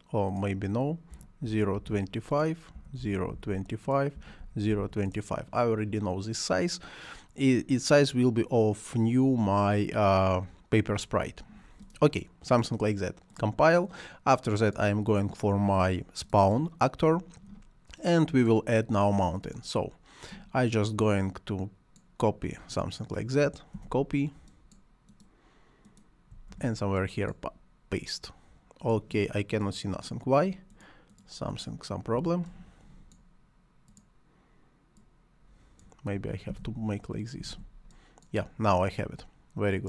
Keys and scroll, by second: 0.9-5.3 typing, 23.8 ctrl+c, 26.5 ctrl+v, 32.2 Delete, 36.5 ctrl+c, 37.4 ctrl+v.